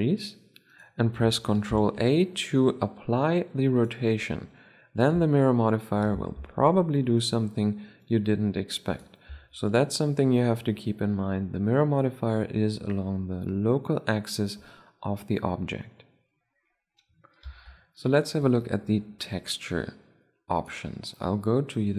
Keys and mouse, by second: 1.2 ctrl+a, 4.6 Tab, 5.6 a, 5.8 a, 6.6-9.0 drag, 8.8 Tab, 9.2 drag, 9.3 drag, 20.3-21.9 drag.